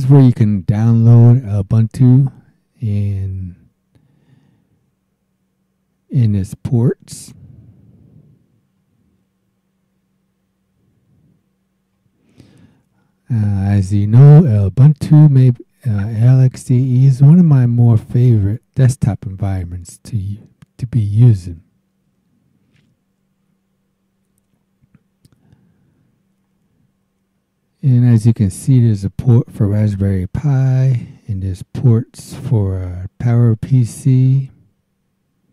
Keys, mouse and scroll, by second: 7.5-8.1 scroll down 2, 8.1-8.9 scroll down 3, 9.4-9.9 scroll down 2, 10.9-11.6 scroll down 2, 11.6 scroll down 1, 11.7-13.3 scroll up 4, 18.2 click, 27.2-27.5 scroll down 1, 27.7 scroll down 1, 29.8-30.9 scroll down 4.